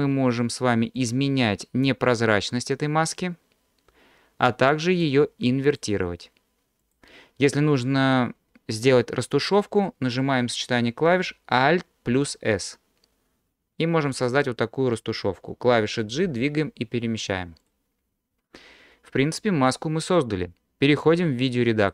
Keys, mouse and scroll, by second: 1.0-5.1 drag, 5.7 click, 6.8 click, 12.1 alt+s, 14.4 click, 16.3 g, 17.7 drag.